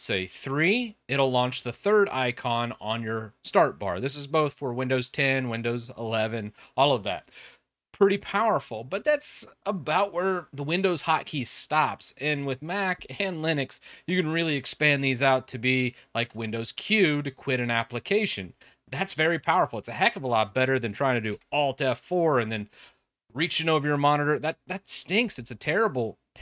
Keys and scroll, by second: 16.1 super+q.